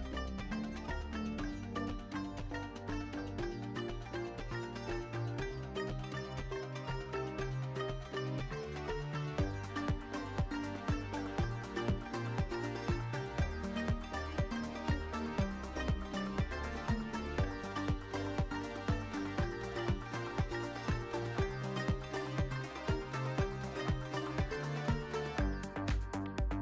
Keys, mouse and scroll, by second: 0.8-2.8 drag, 4.5 Tab, 4.8 ctrl+a, 9.3 click, 9.7 Tab, 10.3 alt+shift+middle click, 10.9 click, 11.8 click, 13.0 alt+shift+middle click, 13.9 alt+middle click, 14.5 alt+z, 15.4 i, 17.8 click, 17.9 `, 19.6 e, 20.8 click, 20.9 s, 22.7 e, 23.4 click, 23.5 s, 24.6 click, 25.3 shift+middle click, 25.9 e.